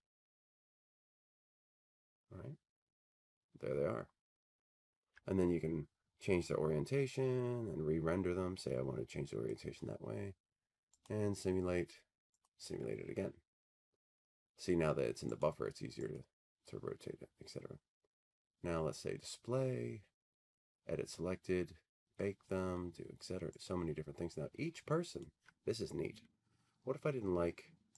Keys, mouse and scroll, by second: 5.0 alt+middle click, 9.5 click, 11.2 click, 12.6 click, 15.5 click, 16.3 click, 23.8 click, 25.3 click, 27.2 middle click.